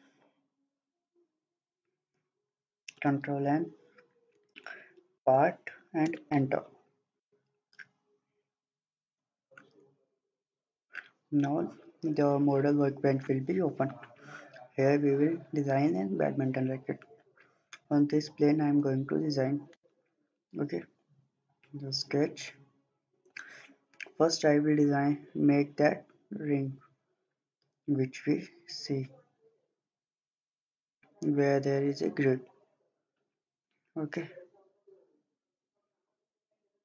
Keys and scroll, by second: 3.0 ctrl+n, 4.1-5.7 typing, 6.0 Return.